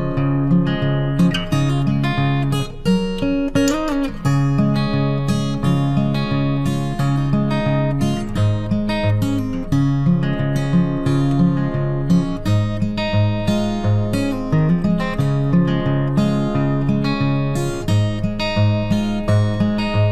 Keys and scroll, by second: 20.0 ctrl+t.